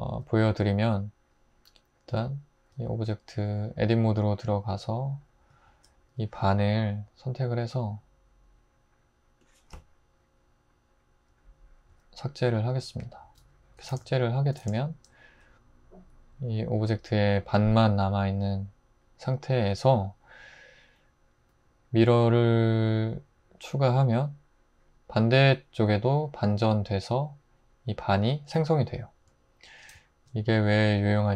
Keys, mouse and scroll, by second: 2.7 Tab, 5.7 alt+z, 11.9 x, 13.4 Tab, 13.9 alt+z, 14.6 alt+z, 28.6-30.9 drag.